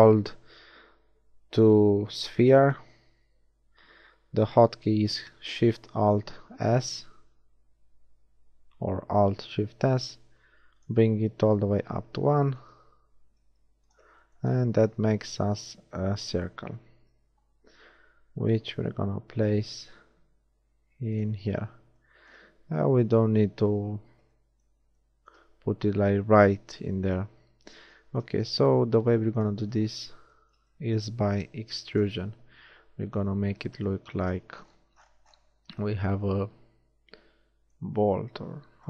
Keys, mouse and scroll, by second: 6.6 alt+shift+s, 10.9 click, 13.1 s, 14.9 z, 17.0 z, 18.7 g, 21.4 z, 28.5 shift+z, 32.1 KP_7, 38.3 z.